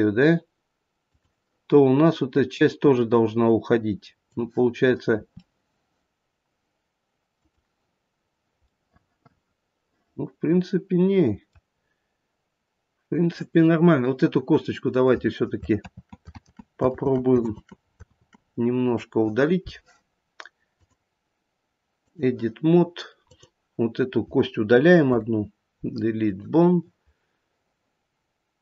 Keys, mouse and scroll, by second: 4.2 click, 5.1 r, 8.8 middle click, 8.9 middle click, 15.8 ctrl+z, 16.3 ctrl+z, 16.9 ctrl+z, 17.5 ctrl+z, 18.1 ctrl+z, 20.7 click, 23.2 click, 25.0 Delete.